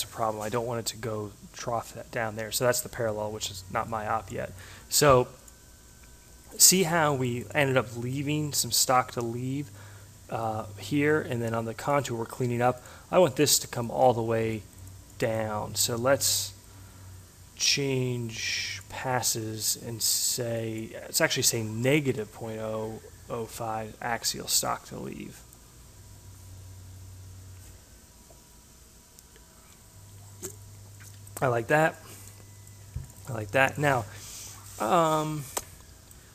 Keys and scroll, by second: 22.1 Delete, 22.2 0, 23.5 5.